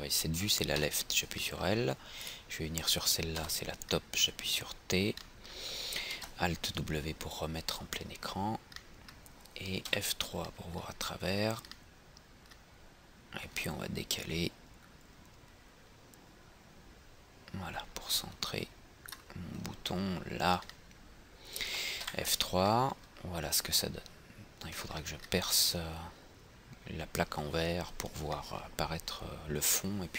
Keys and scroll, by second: 6.3 alt+w, 10.0 F3, 22.2 F3.